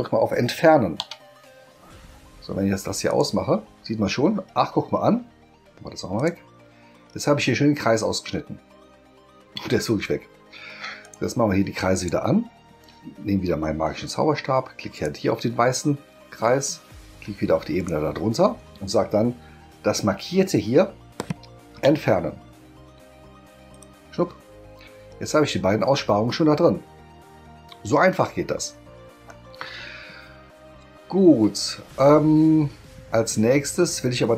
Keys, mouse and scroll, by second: 3.0 click, 6.1 click, 11.0 click, 12.0 click, 14.9 click, 17.8 click, 23.7 click.